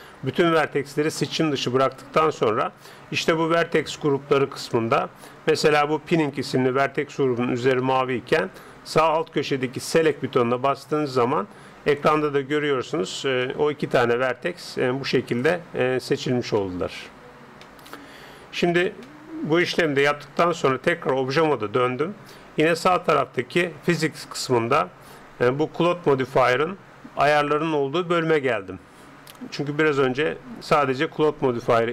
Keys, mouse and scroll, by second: 10.0-11.8 drag, 11.8 middle click, 13.1-22.2 middle drag, 20.1 Tab, 23.4-25.2 drag.